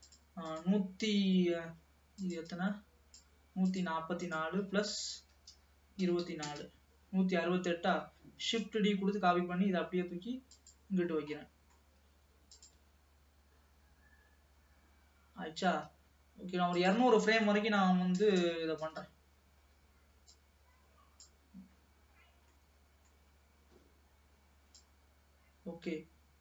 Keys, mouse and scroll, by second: 2.6-6.7 drag, 8.5 shift+d, 11.2-11.6 scroll down 2, 11.6-12.7 middle drag, 12.7 click, 12.8 space, 15.8 space, 16.9-18.4 drag, 18.4 KP_0, 20.3-22.4 drag, 22.4-22.8 scroll down 2, 22.8 middle click, 23.4-24.8 scroll up 2, 24.8-26.4 drag.